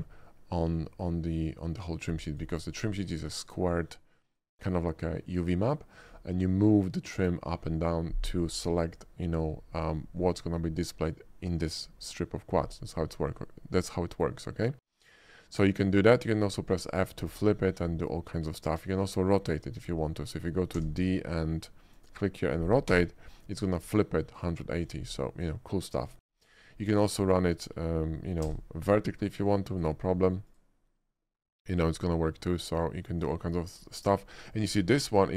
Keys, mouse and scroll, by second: 2.4 click, 15.1 shift+middle click, 15.8 shift+click, 17.0 shift+middle click, 18.2 shift+middle click, 19.5 alt+click, 20.1 alt+middle click, 20.8 d, 22.0 click, 22.9 r, 24.9 right click, 25.2 middle click, 25.8 middle click, 26.2 shift+middle click, 27.1 alt+click, 27.6 alt+middle click, 28.4 d, 29.8 click, 30.6 click, 33.2 click, 33.6 scroll up 1, 34.0 shift+middle click, 34.3 shift+middle click, 35.0 shift+middle click.